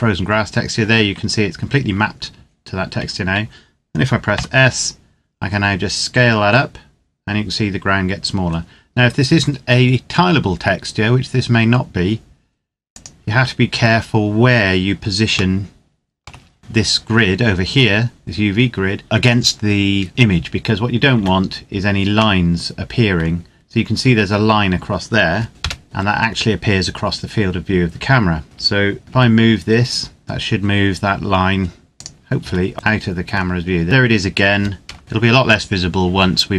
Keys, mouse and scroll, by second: 4.1 s, 12.7 click, 15.3 shift+middle click, 20.5-20.8 scroll up 1, 20.8 scroll down 1, 21.0 Tab, 22.2 middle click, 23.0 scroll down 1, 25.5 KP_0, 28.4 Tab, 29.0 g, 31.7 click, 32.1 Tab, 32.7 middle click, 33.2 scroll down 1, 35.0 click.